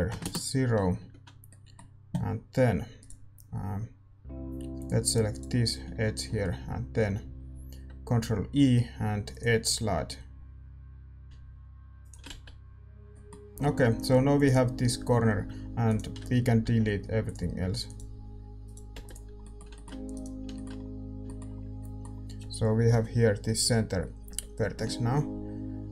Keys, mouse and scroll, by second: 0.2 F6, 1.4-5.3 middle drag, 2.9-4.7 right drag, 4.7-9.3 drag, 5.3-9.3 right drag, 9.3 ctrl+e, 12.2 z, 13.0-15.8 middle drag, 13.7 a, 14.3-17.3 drag, 15.8-24.2 right drag, 17.3 x, 19.1 x, 19.4-22.2 middle drag, 22.2 ctrl+z, 22.9 KP_7, 24.2 KP_5.